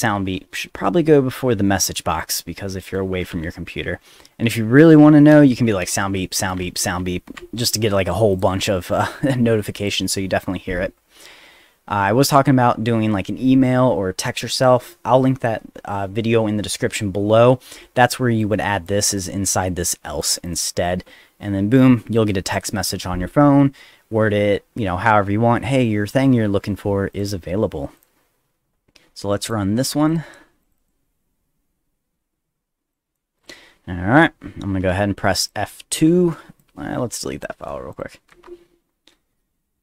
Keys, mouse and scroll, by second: 0.3 BackSpace, 0.7 BackSpace, 1.8 click, 2.8 Return, 3.4 v, 5.3 Return, 5.6 v, 5.8 Return, 6.4 Return, 6.7 v, 7.4 ctrl+s, 8.3 click, 9.1 middle click, 9.8 click, 18.4 click, 19.2 click, 19.7 click, 20.5 click, 27.1 click, 28.0 click, 29.4 click, 30.1 click, 30.6 click, 30.8 click, 32.9 click, 33.4 click, 35.4 click, 36.6-37.4 drag, 37.9 click, 38.3 F2.